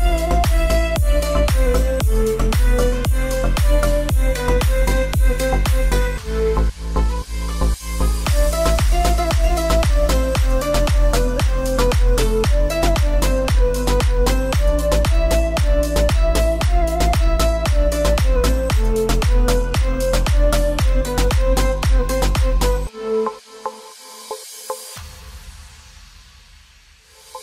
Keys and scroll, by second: 3.2 ctrl+t, 6.1-7.2 typing, 7.4 Return, 11.9 ctrl+Return, 12.2 ctrl+j, 13.8 ctrl+j, 18.2 ctrl+j, 21.5 ctrl+j.